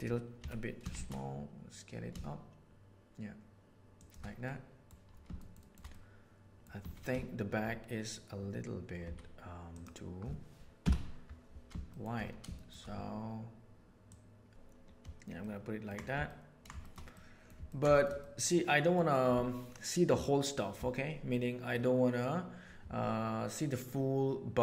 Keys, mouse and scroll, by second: 0.3 s, 4.3-4.8 middle drag, 5.3 shift+middle drag, 5.8-6.6 middle drag, 6.8 z, 9.0 z, 10.7 KP_7, 11.8 shift+middle click, 12.5 shift+middle click, 14.0 middle click, 15.3-15.8 ctrl+middle drag, 16.2-16.6 ctrl+middle drag, 16.7 shift+middle click, 17.1-17.4 middle drag, 17.6 ctrl+middle click, 17.9 shift+middle click, 18.1-18.9 middle drag, 21.6-22.1 middle drag.